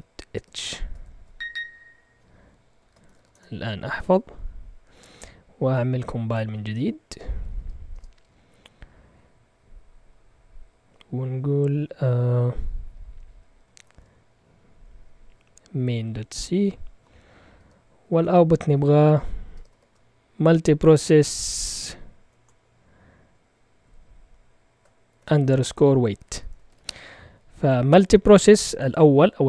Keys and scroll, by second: 0.0-1.5 typing, 2.7 Escape, 2.8-3.9 typing, 6.4-7.8 typing, 13.4-14.4 typing, 15.9 Tab, 17.5-20.1 typing, 21.5-22.2 typing, 23.8 typing, 25.1-26.6 typing.